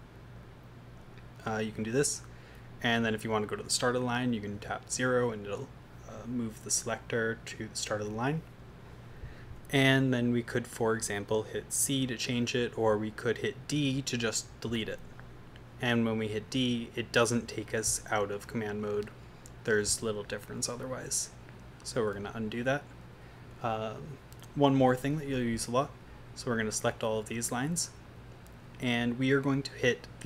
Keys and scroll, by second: 4.6 0, 14.7 d, 22.2 u, 24.8 v, 26.1 Down, 26.3 Down, 26.5 Down, 27.2 Up, 27.5 Down.